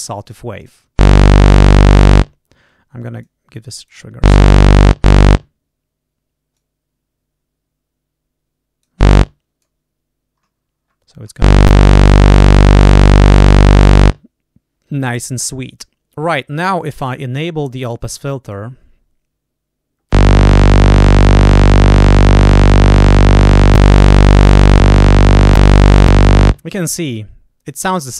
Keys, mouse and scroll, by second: 0.2 click, 0.5 click, 3.1 click, 3.7 click, 6.5-9.0 drag, 9.2 click, 10.3-11.4 scroll down 1, 18.4 click, 23.6 click, 24.6 click, 25.4 click, 25.9 click.